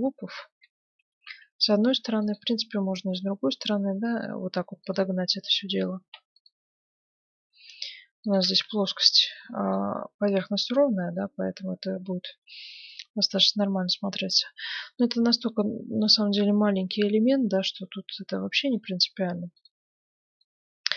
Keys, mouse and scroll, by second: 0.7 Tab, 1.9 ctrl+r, 5.5-7.3 middle drag, 6.0 ctrl+r, 8.5 Tab, 9.4-13.0 middle drag, 13.6-17.4 middle drag, 19.5-20.9 drag, 20.0-20.9 middle drag.